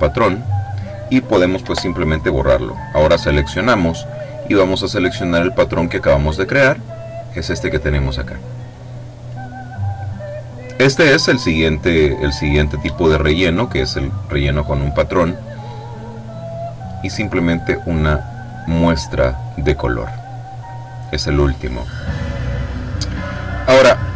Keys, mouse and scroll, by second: 1.6 Delete, 2.3 click, 4.2 click, 7.4 click, 8.6 click, 15.7 click, 17.9 click, 23.5 click.